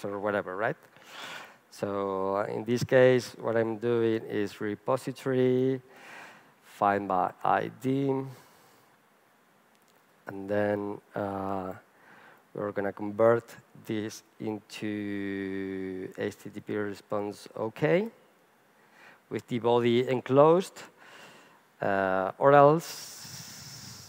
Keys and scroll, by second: 5.4 Return, 13.6 Return.